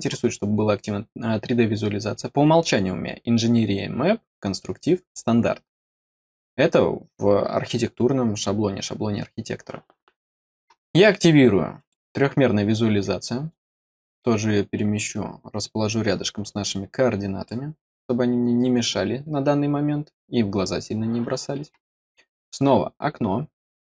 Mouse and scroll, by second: 11.7 click, 13.4-17.4 drag, 22.2 click, 23.5 click.